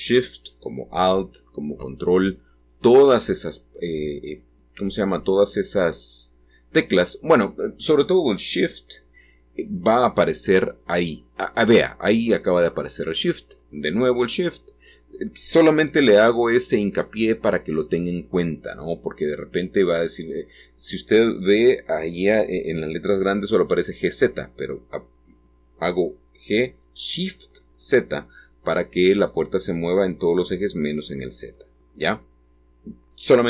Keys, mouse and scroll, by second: 8.5-9.8 scroll up 1, 9.9 middle click, 10.8-12.8 scroll down 1, 12.8 scroll down 1, 12.9-17.5 drag, 20.2-22.8 drag, 22.7 scroll up 1, 23.8-26.5 scroll up 1, 26.5-27.1 scroll down 1, 28.5-33.4 scroll up 1.